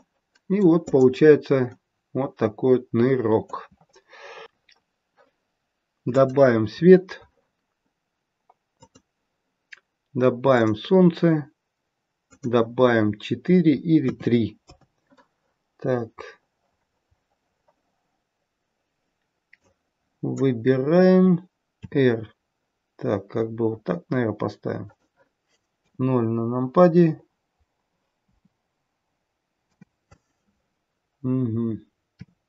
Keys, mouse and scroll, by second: 0.9 click, 1.7 middle click, 6.0 click, 6.0-7.7 scroll up 3, 10.5 click, 12.2 click, 16.3-19.2 scroll down 9, 19.5 click, 19.5-20.4 scroll down 1, 21.7 r, 25.8 KP_0, 27.1-28.2 scroll up 6, 28.2 KP_0, 32.0 scroll down 3, 32.0 r.